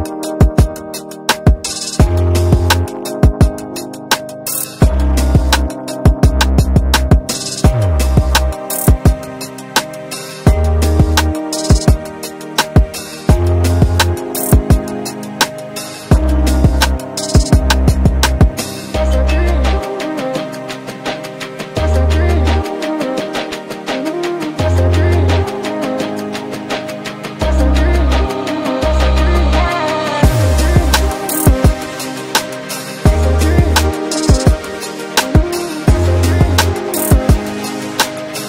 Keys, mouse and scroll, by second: 1.2 shift+click, 2.1-2.6 scroll down 1, 2.6 scroll up 1, 3.0 click, 5.0-8.2 shift+drag, 8.2 right click, 9.6 scroll up 1, 10.6 ctrl+z, 11.2 scroll down 1, 12.8 right click, 16.2 shift+click, 16.9 scroll up 1, 18.2 click, 19.9 click, 20.5 scroll up 1, 21.5 click, 22.0 scroll down 1, 23.4 ctrl+space, 23.7-24.9 scroll up 1, 26.2 scroll down 1, 28.4 right click, 30.1 click, 30.6 shift+right click, 31.1 ctrl+space, 31.2 ctrl+click, 31.9 ctrl+space, 32.3 click, 34.2 ctrl+space, 35.3-38.4 drag.